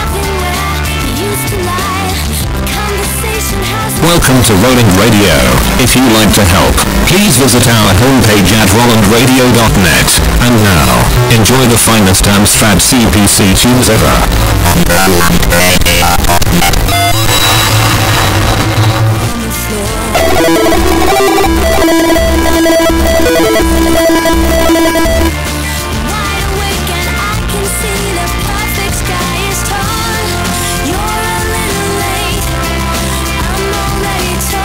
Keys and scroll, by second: 25.5 Page_Down.